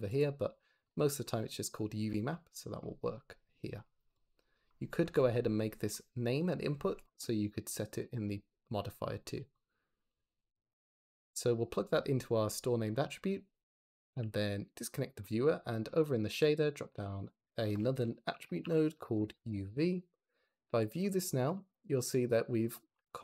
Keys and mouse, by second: 0.0 click, 2.9 click, 4.9 Escape, 5.8 click, 6.6 Escape, 9.4 drag, 14.1 x, 16.2 click, 16.4 shift+d, 16.5 click, 16.6 middle click, 16.9-19.1 drag, 19.1-20.1 middle drag, 20.4 ctrl+shift+click, 20.4 ctrl+shift+middle click, 20.6 ctrl+shift+click.